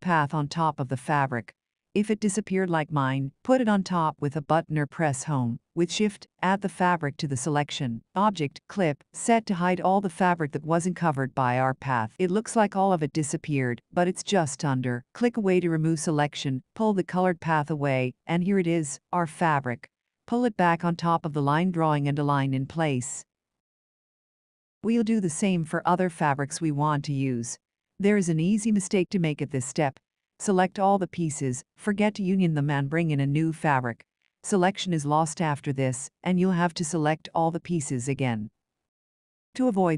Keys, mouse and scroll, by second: 1.8 click, 6.6 shift+click, 10.5 click, 20.8 Right, 21.1 Left, 22.8 Down, 23.3 Up, 24.8 shift+click, 25.5 alt+Tab, 27.8 click, 31.6 click, 36.7 click, 37.6 alt+Tab, 38.4-38.8 ctrl+scroll, 39.4 ctrl+v.